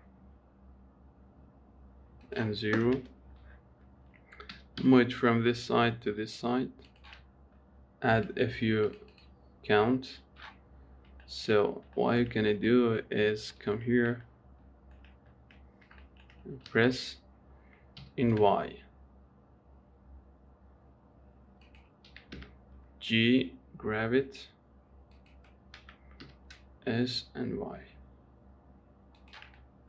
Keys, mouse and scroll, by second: 2.5-4.8 drag, 4.8 g, 8.4-11.5 drag, 11.5 shift+middle click, 11.9-12.3 scroll up 1, 12.3 shift+middle click, 12.6-13.0 scroll up 1, 13.0 shift+middle click, 13.5-13.8 scroll up 1, 13.8 shift+middle click, 14.1-14.5 scroll down 3, 14.5 shift+middle click, 15.4-15.9 scroll up 1, 15.9-16.3 scroll down 3, 16.3 shift+middle click, 16.7 s, 22.4 g, 26.1 s.